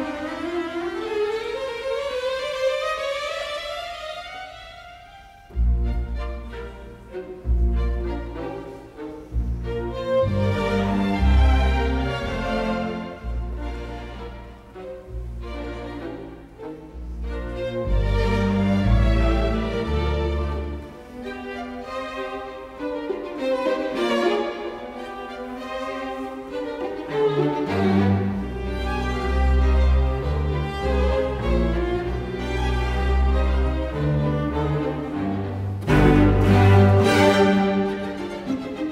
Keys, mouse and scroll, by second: 2.5 Escape, 3.9 Escape, 6.3 space, 9.5 KP_Subtract, 9.8 KP_1, 10.8 Return, 17.8 t, 17.9 space, 24.4 ctrl+g, 30.7 Escape, 31.4 t, 31.5 space, 34.2 ctrl+v, 35.8-37.3 typing, 36.3 Escape, 37.6 Return.